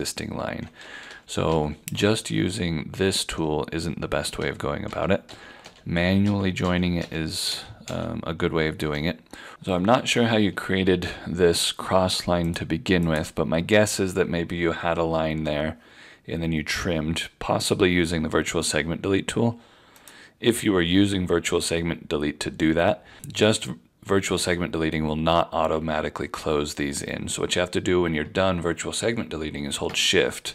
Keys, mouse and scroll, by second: 0.9 ctrl+z, 1.1 ctrl+z, 1.5 ctrl+z, 4.4 ctrl+z, 4.9 ctrl+z, 5.3 ctrl+z, 5.7 ctrl+z, 6.3 ctrl+z, 6.6 ctrl+z, 7.0 ctrl+z, 7.5 ctrl+z, 7.9 ctrl+z, 10.9 F4, 12.5 click, 20.0 click, 29.7 click.